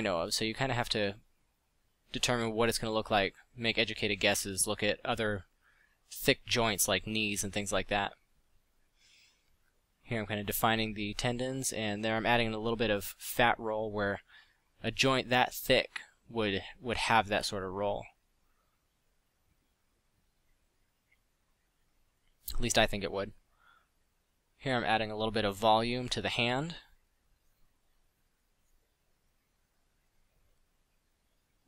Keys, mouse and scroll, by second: 1.1 f, 8.2 f, 10.9 f, 13.7 f, 18.9 f, 24.8 middle drag, 26.8-27.5 middle drag.